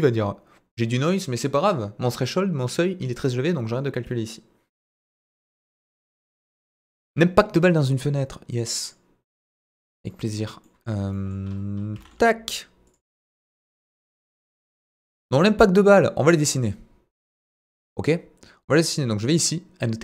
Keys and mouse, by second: 10.6 middle drag, 11.1 middle drag, 11.9 s, 12.0 middle click, 12.9 click, 13.1-13.7 middle drag, 14.3 ctrl+a, 15.4 KP_1, 17.3 click.